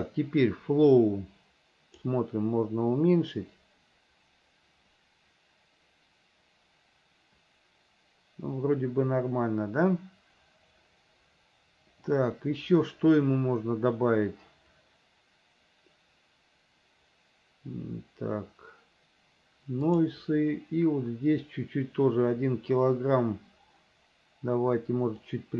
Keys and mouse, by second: 1.0-2.2 drag, 20.0 click, 25.4 click.